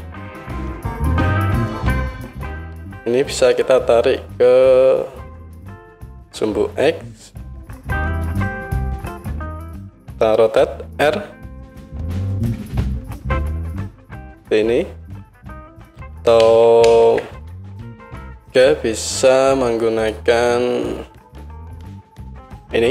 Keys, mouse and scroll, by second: 0.5 KP_1, 1.7-13.1 drag, 11.0 r, 13.1-20.0 middle drag, 16.4 ctrl+z, 16.9 ctrl+z, 17.8 KP_1, 20.0 click, 20.1 middle click, 20.8-22.9 drag.